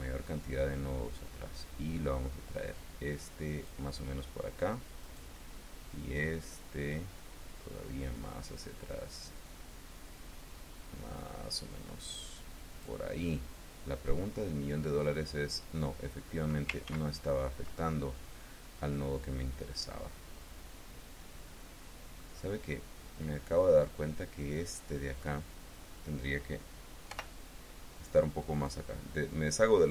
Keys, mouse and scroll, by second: 4.9 click, 6.0-7.2 drag, 7.2-8.1 scroll up 2, 13.2-16.7 drag, 16.7 ctrl+z, 17.6-22.2 ctrl+drag, 22.4-23.9 drag, 26.9 o, 28.5-29.9 drag.